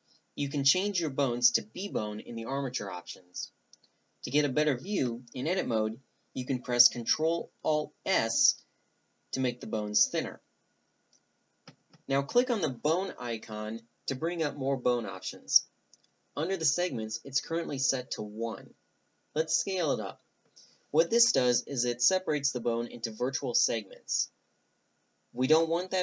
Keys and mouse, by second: 1.5 middle click, 1.7 click, 3.4 Tab, 4.1 a, 6.1 ctrl+alt+s, 11.3-12.4 drag, 11.7 a, 12.4 Tab, 13.3-15.1 drag, 16.4 click, 18.1-23.8 drag, 23.8-25.7 middle drag, 25.7 click.